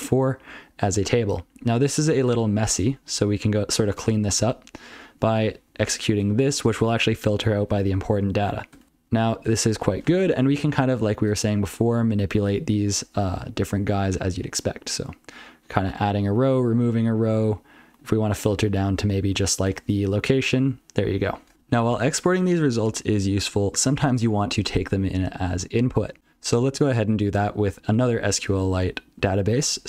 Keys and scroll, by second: 0.3 ctrl+p, 1.3 ctrl+p, 1.6 ctrl+n, 1.9 ctrl+n, 2.0 ctrl+p, 2.2 ctrl+p, 2.4 ctrl+p, 2.6 ctrl+space, 2.7 ctrl+n, 2.9 ctrl+n, 3.0-3.4 ctrl+n, 3.8 ctrl+n, 4.0 ctrl+n, 4.2 ctrl+w, 4.8 ctrl+n, 5.0 ctrl+w, 5.3 ctrl+p, 5.5 ctrl+n, 5.7 ctrl+n, 5.9 ctrl+n, 6.2-6.5 ctrl+f, 6.9 ctrl+alt+f, 7.3 ctrl+alt+f, 7.5 ctrl+alt+f, 7.7 ctrl+alt+f, 8.8 ctrl+n, 9.0 ctrl+n, 9.2 ctrl+p, 9.6 ctrl+p, 11.1 shift+Right, 12.9 ctrl+/, 14.8 alt+shift+Right, 16.2 alt+shift+Left, 16.8 alt+shift+Left, 17.8 alt+shift+Left, 18.2 alt+shift+Left, 18.6 alt+shift+Left, 19.1 alt+shift+Left, 20.1 ctrl+/, 23.6 ctrl+n, 26.2 ctrl+n, 26.3 ctrl+n, 26.8 ctrl+n, 27.2 ctrl+p, 27.6 ctrl+l, 28.0 ctrl+n, 28.5 ctrl+l, 29.1 ctrl+l, 29.6 ctrl+n, 29.8 ctrl+n.